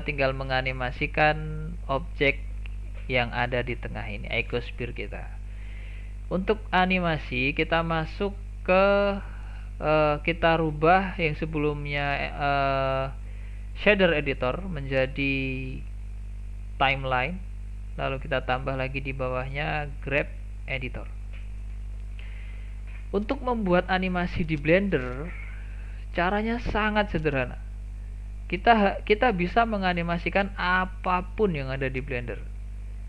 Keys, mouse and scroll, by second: 0.9 click, 1.9 click, 2.8 click, 8.9-11.9 drag, 14.2-17.2 drag, 18.4-22.6 drag, 24.1-24.6 scroll down 1, 24.6 shift+middle click, 25.0-25.3 scroll up 2, 25.3-30.2 middle drag, 30.2-30.5 scroll down 1, 30.5-31.7 shift+middle drag, 31.7-32.0 scroll up 2, 32.2-33.0 middle drag.